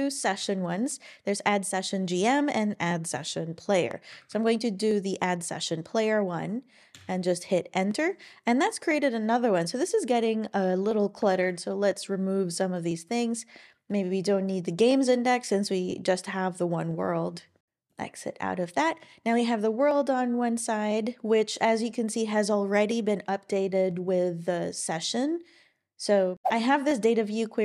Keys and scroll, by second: 0.2 Down, 0.4 Down, 4.3 Down, 6.9 Return, 11.3 ctrl+super+l.